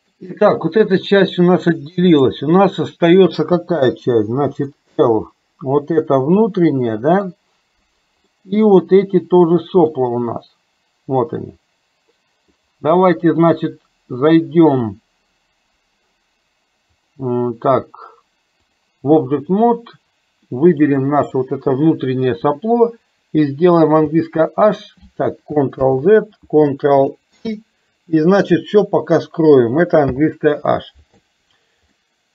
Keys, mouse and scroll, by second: 3.9 l, 4.8-7.4 middle drag, 8.5 middle click, 9.6-10.7 middle drag, 12.6 middle click, 17.0-19.0 drag, 20.7 click, 24.1 h, 25.8 ctrl+z, 27.6 ctrl+i, 30.1 h, 32.0-32.3 middle drag.